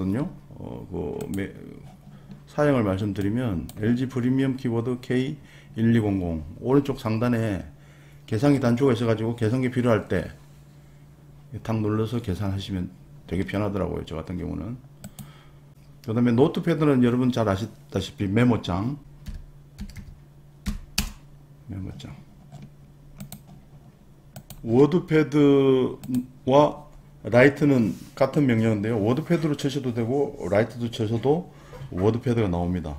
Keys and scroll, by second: 19.3-20.6 typing, 21.0 Return.